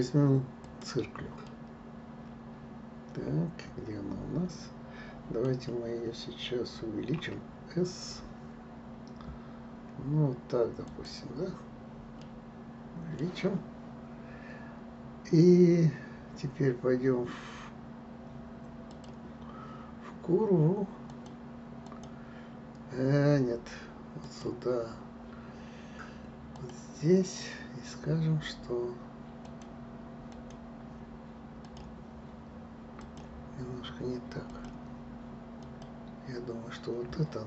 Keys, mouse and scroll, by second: 1.9-4.9 middle drag, 7.6 s, 12.6-15.5 middle drag, 19.3 click, 21.5 click, 22.3 click, 24.6 click, 27.0 click, 29.8-32.1 drag, 33.4-36.1 drag.